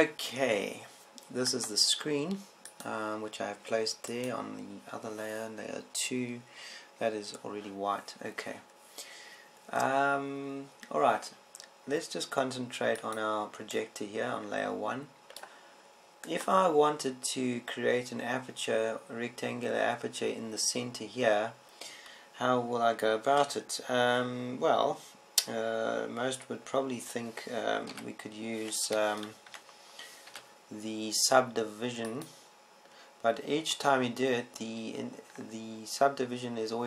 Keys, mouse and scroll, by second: 1.9-3.3 middle drag, 3.3-5.1 drag, 4.5 right click, 18.1-19.8 right drag, 29.7 w, 31.3 Tab, 32.2 w.